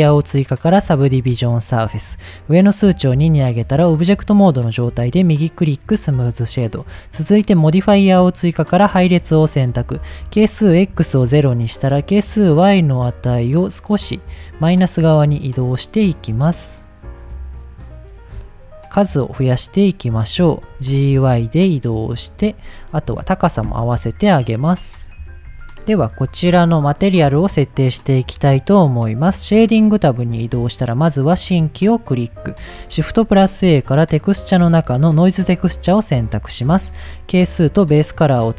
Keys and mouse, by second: 0.7 click, 2.0 click, 4.0 right click, 5.5-5.8 middle drag, 7.8 click, 9.8-11.6 drag, 12.6-14.4 drag, 14.9-16.1 shift+drag, 16.6-18.2 shift+drag, 19.1 click, 19.4 click, 19.8 click, 20.7 g, 21.1 y, 22.3 click, 23.1 KP_1, 24.7 h, 24.8 z, 25.8 click, 29.2 click, 30.8 click, 32.0 middle click, 32.9 shift+a, 36.3 middle click, 37.1-37.9 drag, 38.2 click.